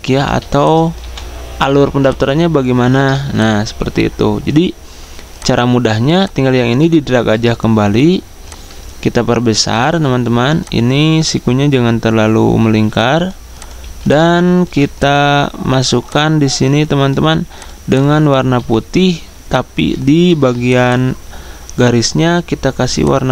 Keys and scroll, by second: 14.7 v, 17.8-18.5 typing.